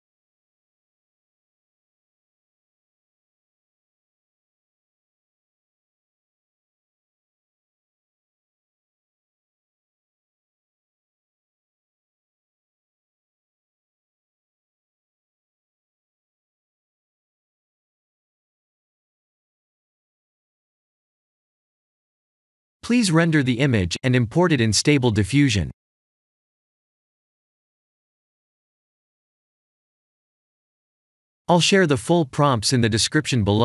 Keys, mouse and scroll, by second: 1.6 shift+d, 3.4 shift+d, 6.7 shift+d, 9.2 shift+d, 11.1 shift+d, 12.9 shift+d, 14.9 shift+d, 18.1 a, 18.8 g, 20.9 click, 22.6 click, 23.5 click, 27.5 F12.